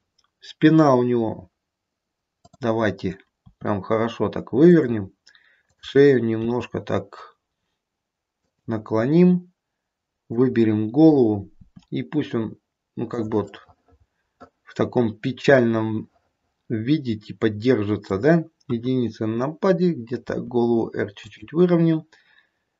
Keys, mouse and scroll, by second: 2.4 click, 3.3 r, 5.6 click, 6.4 r, 10.3 click, 11.6 r, 13.3 middle click, 14.0 middle click, 14.6 middle click, 15.7 middle click, 18.6 KP_1, 20.2 r.